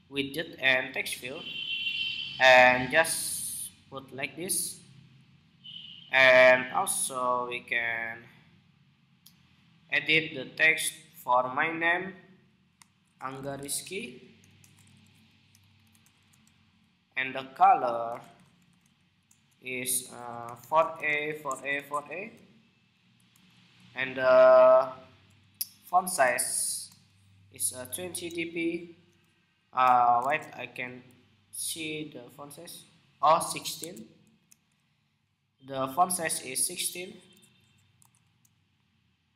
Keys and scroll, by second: 29.9 super+Tab, 33.4 super+Tab.